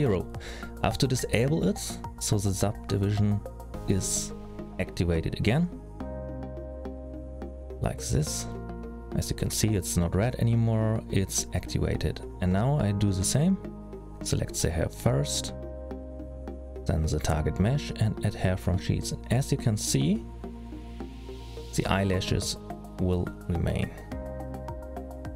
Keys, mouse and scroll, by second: 6.1-6.6 scroll up 1, 6.6 middle click, 6.6-8.6 scroll up 1, 8.6 click, 10.6-11.1 scroll down 3, 11.1-11.6 scroll up 1, 11.9 click, 12.9 click, 15.1 click, 17.0 shift+click, 18.9 click.